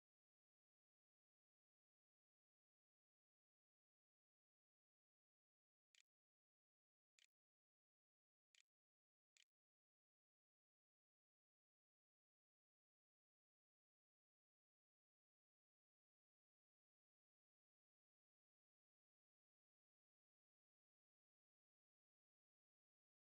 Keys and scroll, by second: 4.5-7.2 typing, 8.8 ctrl+a, 9.2 ctrl+s, 9.6 a.